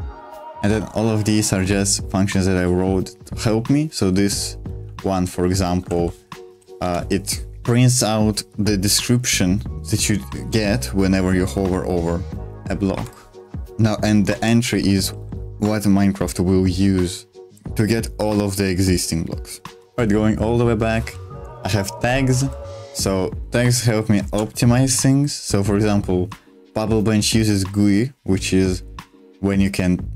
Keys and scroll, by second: 0.0-6.8 typing, 12.9 Escape, 13.7-15.6 typing, 19.8 Escape, 19.8 ctrl+o, 20.5 j, 21.2 j, 21.7 j, 22.3 j.